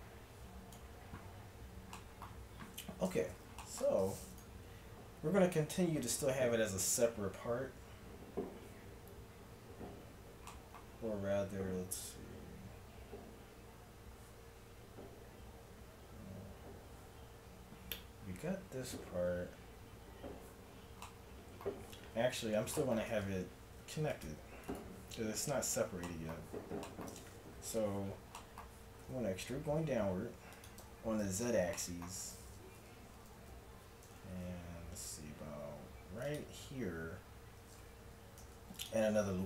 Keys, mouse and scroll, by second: 1.5-4.3 middle drag, 4.3-6.2 drag, 6.2-16.9 middle drag, 20.7 middle click, 22.4 Tab, 23.1 ctrl+Tab, 29.0 e, 30.8 KP_1, 33.2 g, 33.3 z, 34.1 g, 37.4 middle click, 38.4 ctrl+r.